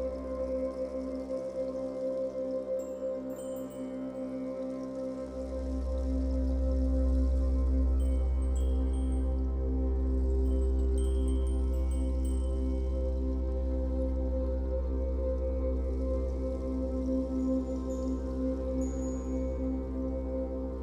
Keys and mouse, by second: 0.3 click, 1.9 click, 3.4 shift+5, 4.6 Return, 6.4-12.3 drag, 13.2 space, 16.0 -, 16.6 space, 18.4 click, 19.1 click, 20.4-20.8 drag.